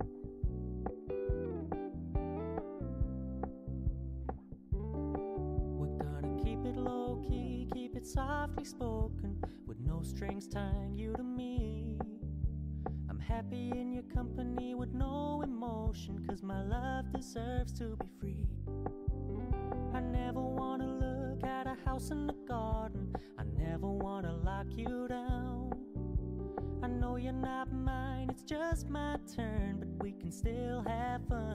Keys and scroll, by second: 24.1 ctrl+Return.